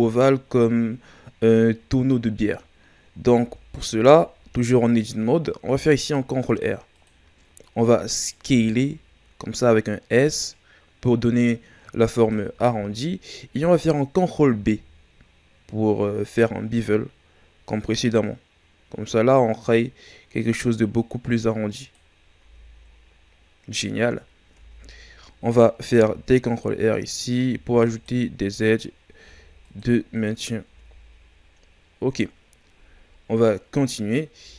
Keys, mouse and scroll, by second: 3.4 Tab, 4.2 a, 5.6 ctrl+r, 8.4 s, 13.0-13.5 shift+scroll down 4, 14.5 ctrl+b, 22.4 Tab, 24.5 Tab, 25.9 ctrl+r, 27.5 ctrl+r, 30.6 Tab, 31.5 scroll down 2, 32.7 scroll up 2, 33.9-34.4 scroll up 2, 34.4 Tab.